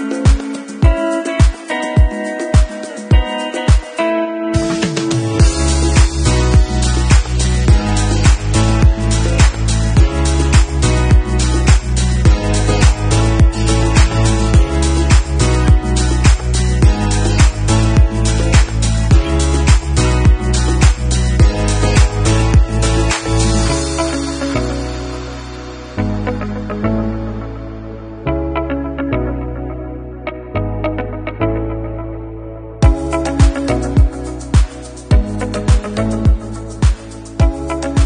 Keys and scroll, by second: 14.7 ctrl+c, 17.1 ctrl+d, 26.4 ctrl+v, 28.4 ctrl+d.